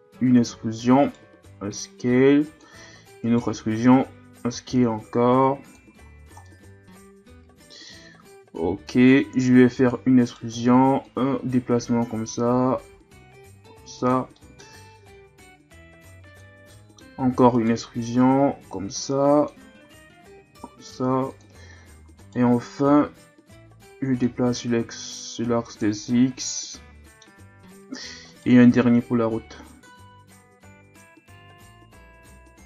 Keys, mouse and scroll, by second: 0.5 e, 2.8 e, 5.9 z, 6.1-6.5 scroll down 1, 6.5-9.5 middle drag, 9.7 e, 11.0-12.7 drag, 12.7 s, 14.4-15.7 middle drag, 15.7-16.7 drag, 16.7 middle click, 17.2 e, 18.2-19.8 drag, 19.8 s, 21.9 e, 23.5-24.7 drag, 24.7 s, 26.1-28.1 middle drag, 28.1 e, 28.8-31.4 drag, 31.4 s.